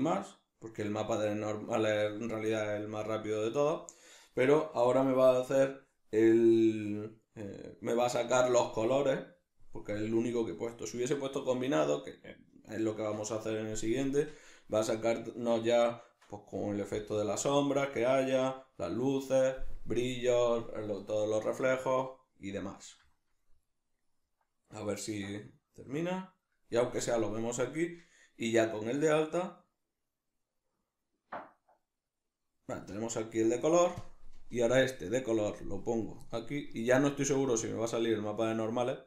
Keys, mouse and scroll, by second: 34.0 click, 36.3-37.6 middle drag, 37.6 click.